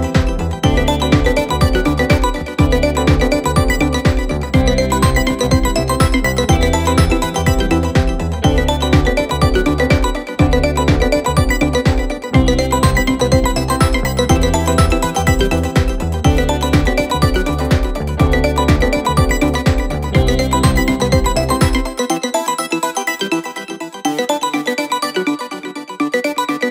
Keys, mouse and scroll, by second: 2.4 click, 8.6-12.3 drag, 12.3-14.1 scroll down 6, 14.1-16.7 scroll down 2, 16.7-18.0 scroll down 7, 18.0-23.5 drag, 26.3-26.7 drag.